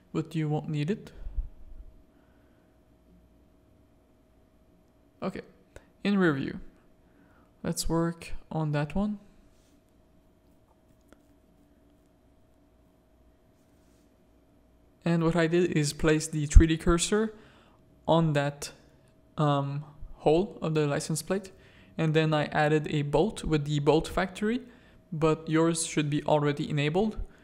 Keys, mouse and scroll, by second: 1.1 click, 1.7 shift+click, 2.8 click, 3.3 z, 3.7 alt+a, 4.1 z, 4.7 click, 5.6 click, 6.3 Tab, 6.7 shift+click, 7.5 1, 8.0 z, 8.3 a, 8.6 click, 9.8 shift+s, 10.8 Tab, 11.2 alt+a, 11.8 z, 12.2 shift+a, 21.1-23.4 drag.